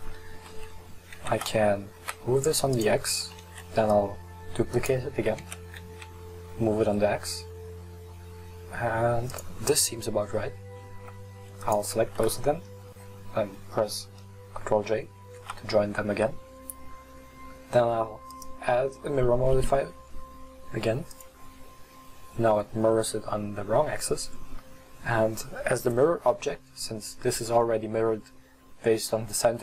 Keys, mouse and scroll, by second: 1.2 g, 3.6 shift+d, 5.5 g, 11.7 shift+right click, 15.3 ctrl+j, 18.4-21.5 drag.